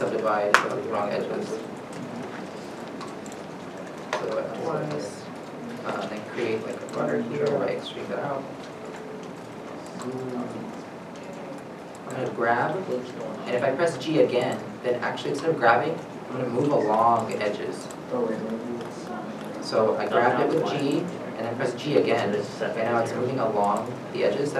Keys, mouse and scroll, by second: 0.3 shift+click, 0.3 middle click, 0.6 ctrl+z, 1.6 shift+click, 5.8 3, 6.5 middle click, 7.1 shift+middle click, 7.1 e, 8.0-8.8 scroll, 9.0-9.5 scroll down 1, 9.6 middle click, 11.5-12.5 scroll up 1, 12.5 middle click, 12.8 g, 16.7 g, 19.7 g, 20.2 right click, 20.2 g, 22.1 g.